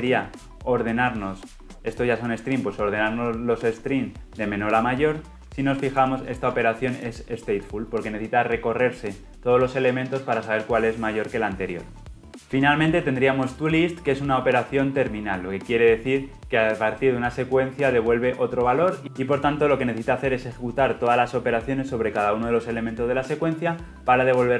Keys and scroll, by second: 5.9 ctrl+b, 12.3 ctrl+alt+Left, 16.2 ctrl+b.